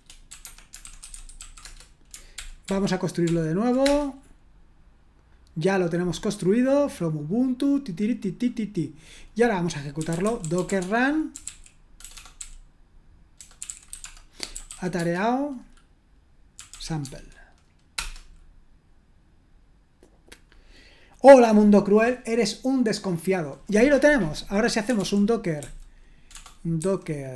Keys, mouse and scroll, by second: 0.0-1.8 typing, 0.4 Escape, 2.4 ctrl+p, 2.6 ctrl+p, 3.2 ctrl+p, 3.8 Return, 9.7-15.2 typing, 16.3-17.2 typing, 17.9 Return, 24.6-27.3 typing.